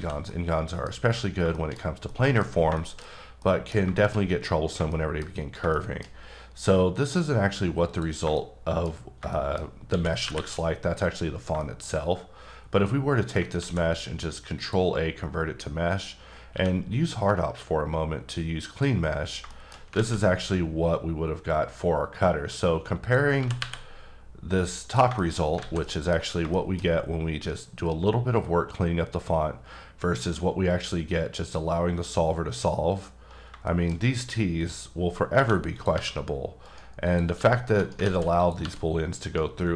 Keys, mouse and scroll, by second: 0.3 middle click, 0.9-1.4 scroll down 1, 1.5 middle click, 1.7-2.1 scroll down 1, 2.1 middle click, 2.8 shift+middle click, 3.0-3.4 scroll down 1, 3.4 middle click, 4.1 shift+scroll down 2, 4.2-4.7 scroll up 2, 4.9 shift+middle click, 5.7 middle click, 6.2 scroll down 1, 7.9 click, 8.3 shift+middle click, 9.3 shift+double middle click, 9.9 shift+d, 10.3 y, 11.0 click, 11.6 shift+middle click, 13.6 ctrl+a, 14.6 click, 16.5 q, 18.7 click, 19.5 shift+middle click, 19.9 alt+a, 23.0 click, 23.4 g, 23.6 y, 24.8 click, 25.1-25.6 shift+scroll up 2, 25.2 shift+middle click, 25.6 alt+a, 25.8 middle click, 26.1 scroll down 2, 26.5 middle click, 33.4 middle click, 33.5-34.6 scroll up 6, 33.7 shift+middle click, 34.6 click, 34.9 scroll up 2, 35.3 2, 35.8 click, 35.9 g, 36.6 right click, 37.1 click, 37.4 g, 37.8 right click, 38.1 alt+z, 38.4 click, 38.6 g, 39.2 right click, 39.6-39.7 scroll down 3.